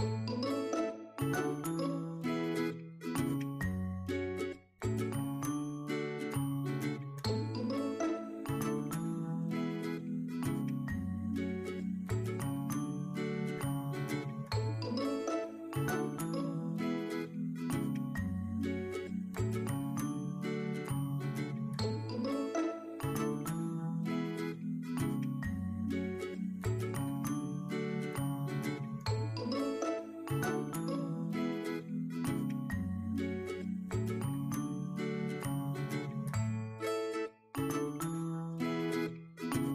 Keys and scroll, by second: 0.4-2.1 typing, 4.5-6.3 typing, 6.6 shift+super+5, 7.3 super+s, 7.6 super+Right, 11.0 shift+=, 11.2 shift+[, 15.3 shift+=, 15.7 shift+[, 16.2 shift+8, 18.7-19.6 typing, 20.8-22.2 typing, 25.6 shift+=, 25.8 shift+', 26.9 shift+m, 28.9 shift+=, 29.4 shift+[, 35.0 shift+Return, 35.6 shift+,, 36.1 shift+f, 37.0 shift+x, 37.3 shift+., 37.9 shift+super+., 38.1 shift+super+s.